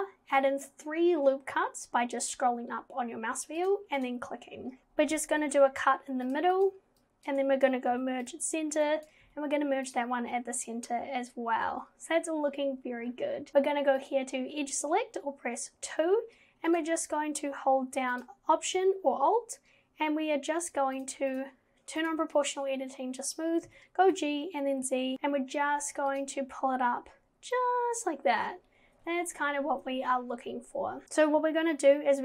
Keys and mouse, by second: 4.8 ctrl+z, 5.5 ctrl+r, 7.2 click, 7.9 m, 9.0 click, 9.3 m, 14.1 click, 21.0 click, 21.3-22.7 drag, 23.7 g, 31.0 ctrl+z.